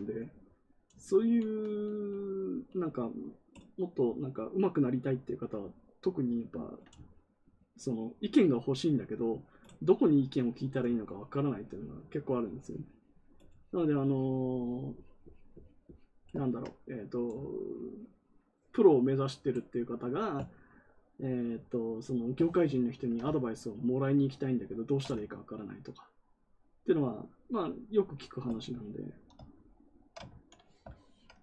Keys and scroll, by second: 22.4 ctrl+z, 30.2 ctrl+z.